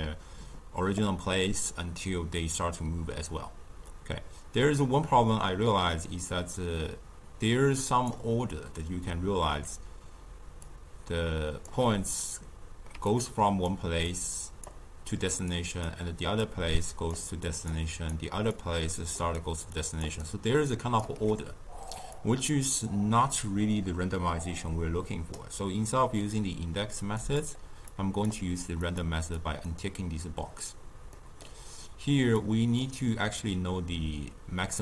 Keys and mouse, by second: 10.6-12.9 drag, 12.9-21.1 typing, 13.0 click, 14.0 click, 15.3 click, 15.5 click, 16.4 click, 17.8 click, 18.5 click, 19.7 click, 20.2 right click, 22.1-27.3 drag, 27.8-31.1 drag, 31.1-32.3 middle drag, 32.3-33.2 drag.